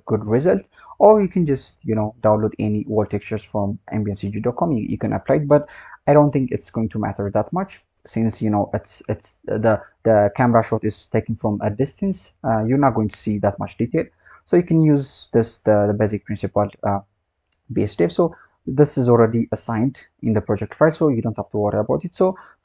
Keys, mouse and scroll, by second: 0.0-2.8 scroll down 2, 2.8-5.9 scroll up 3, 7.4-7.9 scroll down 3, 7.9-8.6 scroll up 9, 10.4-10.9 scroll down 4, 13.0-13.9 scroll down 2, 13.9 scroll down 3, 14.9 click, 19.2-19.6 scroll down 2, 19.6-20.8 scroll up 2, 20.8-21.9 scroll up 4, 21.9-22.4 scroll down 2, 22.4-22.6 scroll up 12.